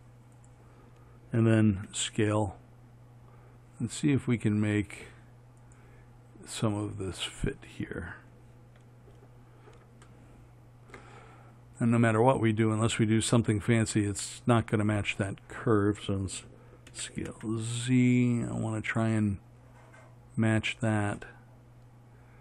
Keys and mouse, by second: 2.0 s, 17.2 s.